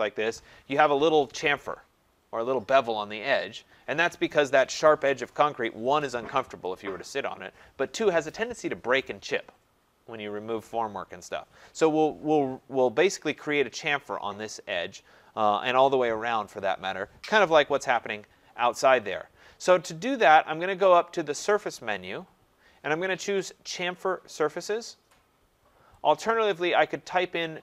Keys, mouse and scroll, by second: 21.5 click, 26.1 click.